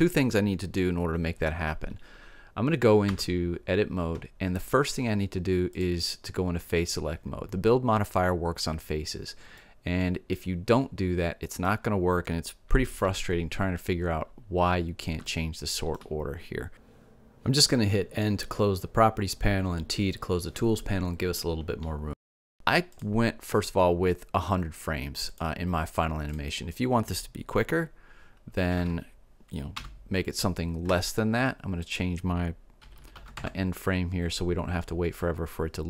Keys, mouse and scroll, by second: 3.1 Tab, 9.6-11.6 middle drag, 13.1 KP_7, 15.0 middle click, 15.0 scroll up 1, 17.5 n, 18.5 middle click, 19.3 t, 20.2 middle click, 20.6 middle click, 22.5 middle click, 23.0-28.3 drag, 31.9-34.4 drag, 33.0 KP_1.